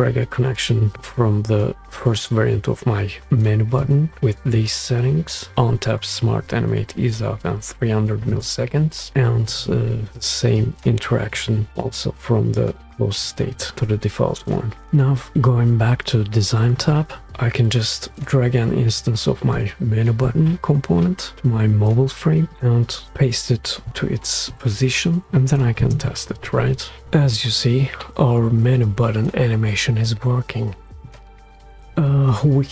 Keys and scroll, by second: 22.5 space, 26.5 shift+space.